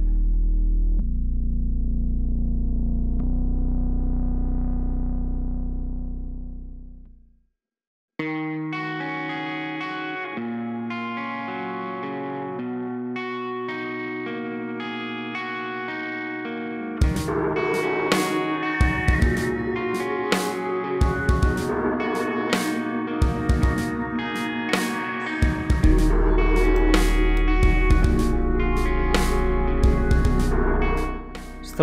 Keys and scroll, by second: 3.7-4.5 typing, 4.7 super+c, 4.8 super+v, 6.4 super+x, 6.6 super+z, 7.2 super+v, 9.2 super+c, 10.3 super+v, 11.3 super+z, 11.4 super+z, 11.5 super+z, 12.6 super+x, 13.1 super+b, 13.4 super+v, 15.9 super+z, 17.7 super+x, 18.0 super+v, 19.7 super+x, 20.0-22.0 typing, 21.7 Return, 22.8 super+z, 23.0 super+x, 23.3 super+v, 24.5-25.3 typing, 26.4 typing, 30.5 z.